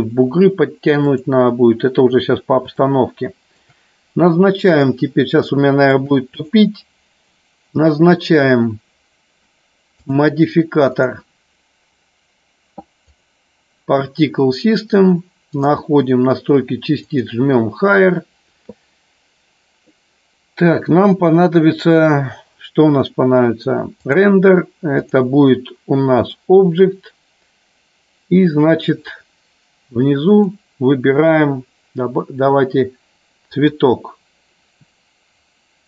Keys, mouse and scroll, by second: 1.1 click, 2.9 shift+middle click, 5.4 shift+middle click, 6.4 click, 9.9 click, 11.0-13.2 drag, 15.5 click, 23.9 click, 25.0-26.2 drag, 30.4 click.